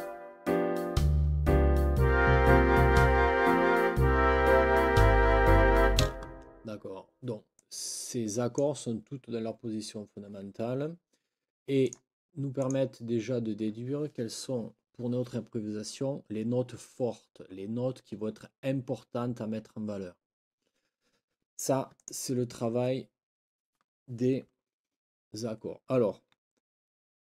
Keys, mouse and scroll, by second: 6.0 space, 7.6 click, 7.6 scroll up 2, 7.8 click, 11.8 click, 12.6 click, 22.0 click.